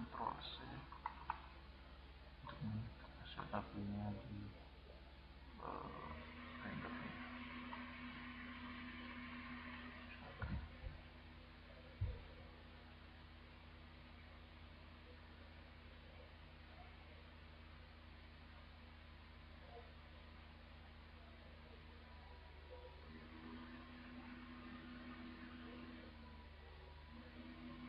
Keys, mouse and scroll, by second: 2.3-3.9 drag, 5.3-6.8 drag, 7.7-8.9 drag, 9.3 click, 10.1 click, 15.8-17.4 drag, 17.5 click.